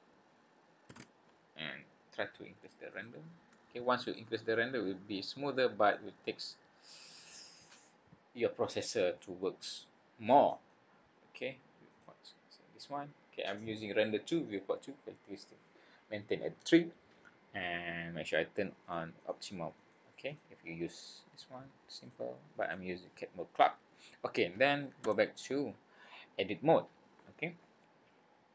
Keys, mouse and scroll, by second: 1.1 ctrl+KP_Subtract, 2.9 click, 4.0 click, 6.8 click, 9.1 middle click, 11.9 click, 18.8 click, 19.2 click, 19.7 click, 20.9 click, 22.1 click, 22.6 click, 25.0 Tab, 28.2-28.5 scroll down 3.